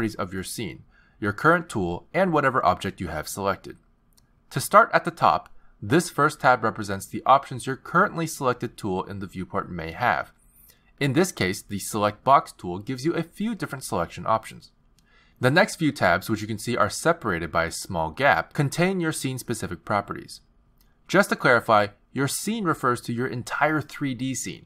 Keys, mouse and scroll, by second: 6.5 click, 9.4 t, 10.3 click, 11.1 t.